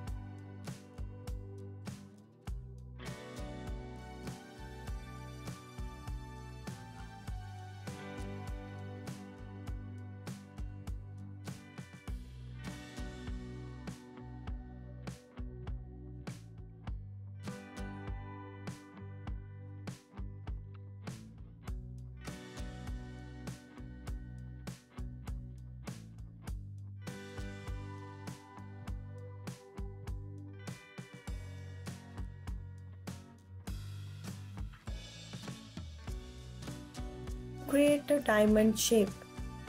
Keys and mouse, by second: 0.5 KP_1, 2.0 s, 3.2 z, 5.2 click, 6.2 KP_3, 7.3 r, 8.3 click, 8.9 g, 10.5 click, 10.9 r, 12.7 click, 12.9 KP_1, 16.1 shift+d, 19.0 click, 19.7-20.5 alt+middle drag, 21.3 KP_3, 22.0 click, 22.8 ctrl+s, 24.0 drag, 25.0 KP_1, 26.0 g, 27.0 click, 27.7-29.2 alt+drag, 29.4 ctrl+s, 29.7 KP_1, 30.4 click, 31.7 ctrl+s, 32.9 ctrl+s, 34.2 middle click, 34.4 click, 38.0 shift+click, 38.8 shift+a.